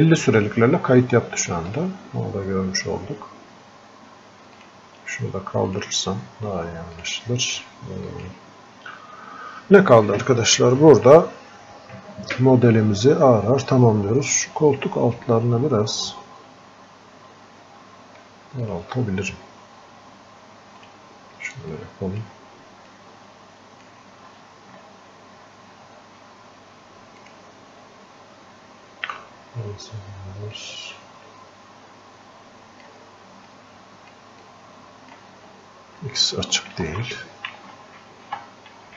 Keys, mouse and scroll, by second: 24.2 scroll up 1, 27.4-38.9 drag.